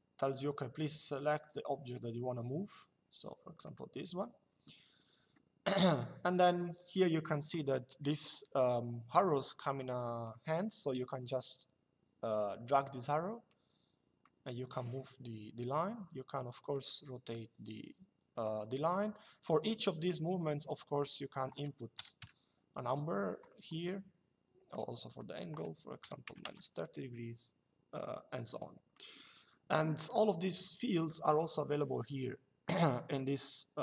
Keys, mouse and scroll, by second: 3.4 click, 5.1 middle click, 10.0 click, 13.9 click, 16.4 click, 19.8 click, 21.7 KP_5, 24.4 click, 25.8 KP_5, 27.7 click.